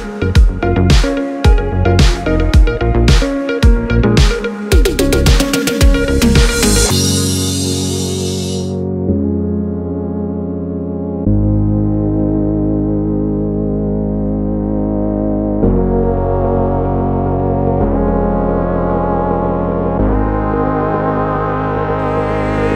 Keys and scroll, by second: 9.3 s, 10.9 u.